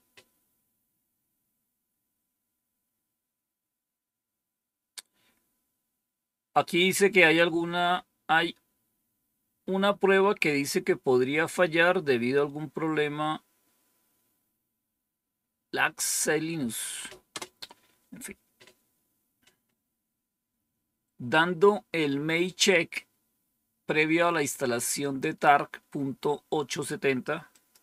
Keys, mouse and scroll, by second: 17.3 Return, 27.4 click.